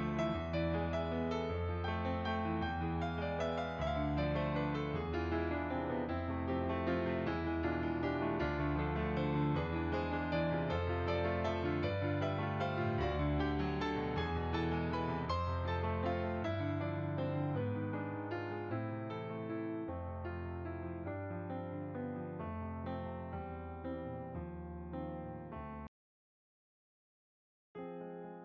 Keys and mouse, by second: 1.5 shift+a, 2.8 click, 5.5 middle click, 8.2 shift+a, 9.9 click, 10.6 s, 12.1 z, 12.7 click, 13.1 g, 13.6 click, 14.1 s, 15.3 z, 15.7 click, 15.9 middle click, 19.0 click, 20.2 g, 20.8 click, 22.2 middle click, 22.9 g, 23.3 click, 23.6 middle click, 24.5 g, 26.2 click, 27.8 g, 27.8 click.